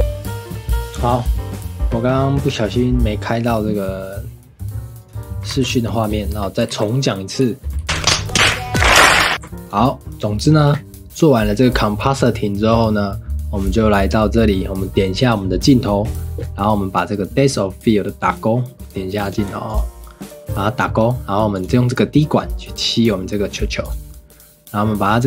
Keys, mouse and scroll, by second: 0.0 ctrl+s, 5.8 ctrl+s, 6.1-6.7 shift+middle drag, 6.7 ctrl+s, 7.2 scroll down 1, 7.4 shift+middle click, 7.8 ctrl+s, 9.3 ctrl+s, 19.2 click, 19.7 click, 22.0 click.